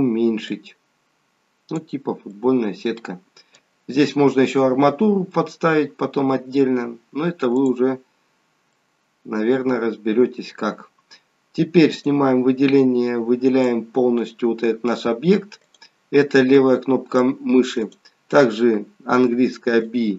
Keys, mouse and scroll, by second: 0.4 click, 2.4 middle click, 7.6 click, 8.2-8.8 scroll up 1, 8.8 middle click, 8.8 scroll up 1, 10.6-11.4 scroll down 2, 12.0 click, 12.8 click, 15.7 click, 16.6 click, 17.8 click, 19.3 b.